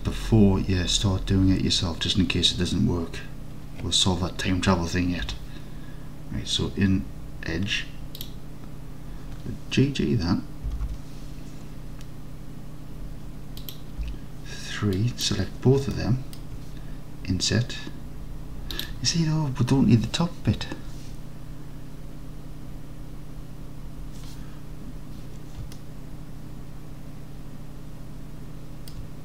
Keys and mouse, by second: 5.3 2, 8.2 click, 10.7 g, 10.9 g, 13.7 click, 14.1 3, 15.0 click, 16.0 alt+click, 18.8 click, 25.8-29.0 alt+drag.